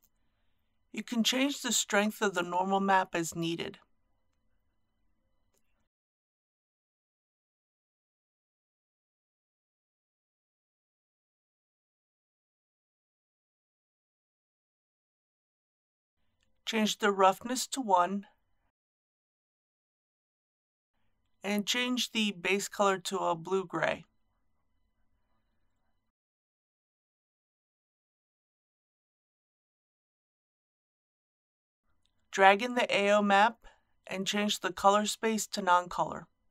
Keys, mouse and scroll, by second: 0.5 click, 3.2 KP_1, 3.4 KP_Decimal, 3.7 KP_3, 6.2 click, 7.0 KP_1, 7.2 KP_Decimal, 7.4 KP_6, 9.1-17.3 middle drag, 18.0-26.3 drag, 27.2 KP_5, 28.4 KP_6, 28.7 KP_1, 29.1 KP_9, 31.8-36.5 drag.